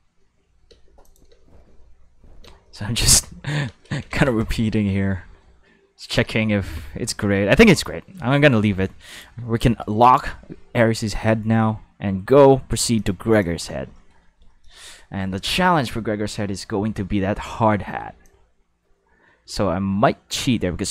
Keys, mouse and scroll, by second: 0.7 space, 1.0 click, 1.3 space, 2.4 space, 2.7 middle click, 3.0 click, 3.2 space, 3.6 space, 4.1 ctrl+s, 6.0 click, 6.3 space, 7.5 space, 9.1 click, 12.9 click, 13.3 click, 18.2-20.9 drag.